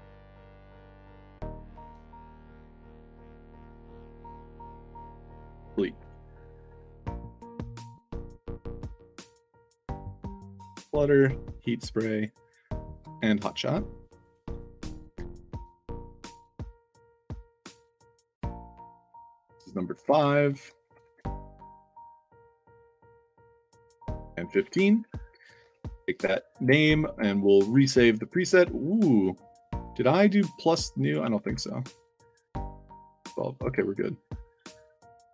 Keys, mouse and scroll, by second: 0.9 click, 1.7-4.3 typing, 4.9 click, 7.9 drag, 8.4 drag, 8.9 drag, 9.3 drag, 9.9-10.4 drag, 10.7-11.2 drag, 11.5 click, 14.2 click, 14.4 click, 14.9-17.2 typing, 16.4 click, 17.4 middle click, 17.9 click, 18.9 ctrl+v, 20.6 ctrl+a, 20.9 ctrl+c, 22.1 click, 22.4 ctrl+v, 23.5 1, 24.4 middle drag, 25.6 ctrl+c, 26.4 click, 27.6 drag, 28.7 click, 30.0 click, 31.0 click, 31.5 c.